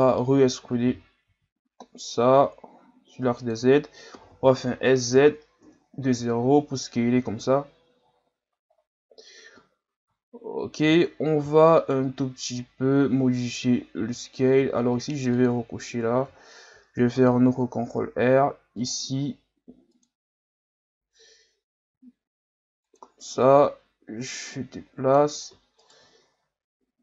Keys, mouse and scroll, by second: 0.0 scroll up 1, 0.9 e, 4.1 s, 6.1 Tab, 6.6-7.3 scroll down 10, 8.0-9.2 scroll up 10, 9.2-9.7 scroll down 3, 9.7 scroll up 2, 10.2 scroll down 2, 10.5 scroll up 2, 10.8 Tab, 11.8 alt+right click, 15.3 click, 16.7 ctrl+r, 20.0 click, 20.6-21.4 scroll up 1, 21.4-21.9 scroll up 1, 21.9 s, 23.4-25.8 drag, 25.8 alt+right click, 26.4 s.